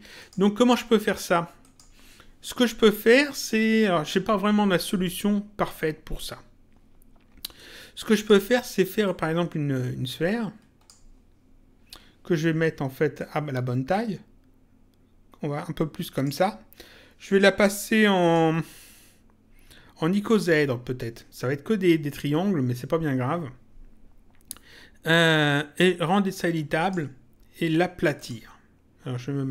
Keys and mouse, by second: 0.1 click, 1.6 click, 7.5 click, 9.0 click, 13.1 click, 18.2 click, 20.2 click, 26.7 click, 28.1 click.